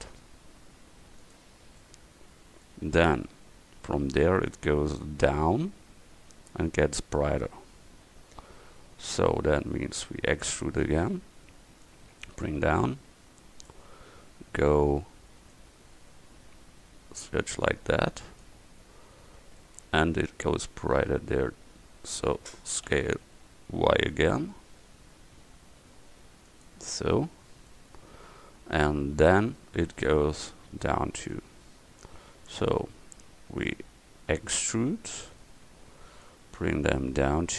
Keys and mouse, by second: 2.4-7.4 middle drag, 9.4-10.9 middle drag, 10.9 e, 12.7-13.7 drag, 15.6-18.1 drag, 19.7 middle click, 20.7 middle click, 23.0 s, 31.6 middle click, 32.7 middle click, 32.9-34.1 middle drag, 35.2 e, 36.3-37.5 drag.